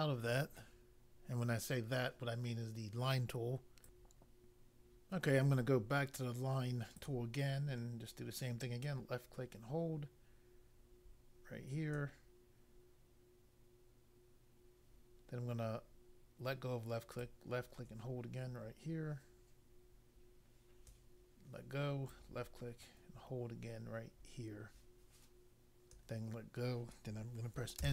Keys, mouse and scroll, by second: 3.8 click, 6.9 click, 8.8 click, 17.2 click, 22.1 click, 27.8 Return.